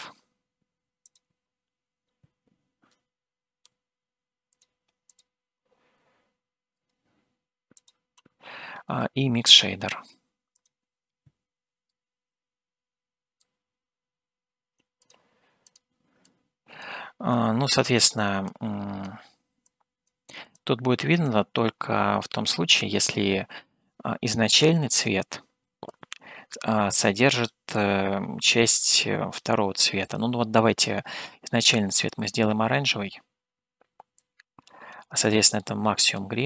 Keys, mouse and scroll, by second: 7.0 shift+d, 9.2 shift+a, 16.2 click, 17.3 click, 18.4 click, 19.7 click, 20.5 click, 22.5 click, 25.9-27.5 drag, 28.7-29.7 drag, 30.0 click.